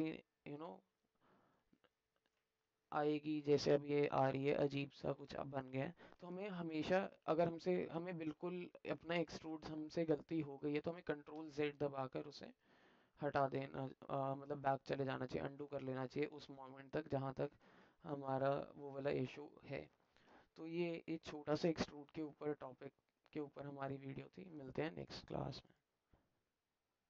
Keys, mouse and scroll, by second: 1.8 middle click, 2.8-5.9 alt+middle drag, 16.4 alt+middle click, 17.8 ctrl+Tab.